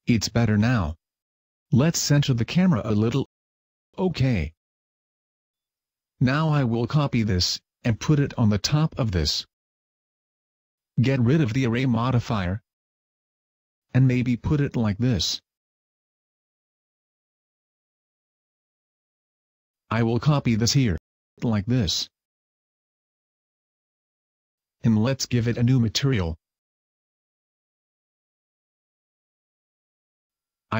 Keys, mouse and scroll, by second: 1.7 Escape, 2.5 right click, 3.3 g, 4.0 click, 4.5 g, 5.7 click, 6.0 shift+middle click, 6.1 scroll up 1, 7.5 right click, 7.9-8.5 scroll up 1, 8.5 shift+d, 10.0 click, 11.3 click, 12.9 click, 14.3 Tab, 15.3 s, 16.9 click, 17.6 Tab, 18.1 click, 20.1 Tab, 21.2 shift+d, 24.1 click, 24.7 Tab, 27.5 click, 29.3 click, 30.2 click.